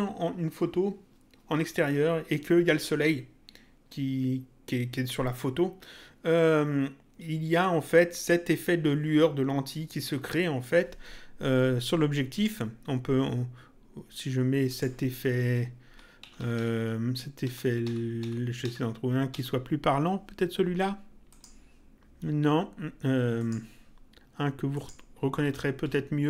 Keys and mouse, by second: 12.3 click, 14.6 click, 15.8 Up, 16.1 Down, 19.3 Up, 21.3 click, 23.3 click, 24.6 click, 25.1 Up.